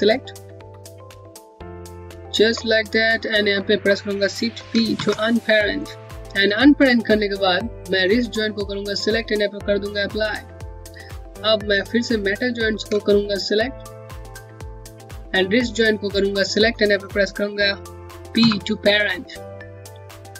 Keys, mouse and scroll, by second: 1.1 click, 1.9 click, 2.8-3.1 scroll down 1, 3.2 middle click, 6.1 click, 11.7 click, 12.2 click, 12.6 click, 13.3 click, 14.1 click, 19.6 click, 20.0-20.3 scroll down 1.